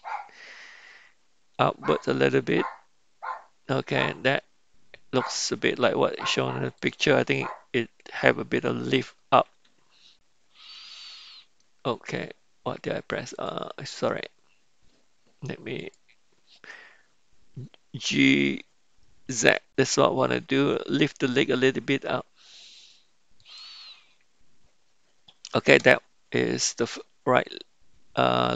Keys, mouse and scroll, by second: 15.8-18.0 drag, 18.0 g.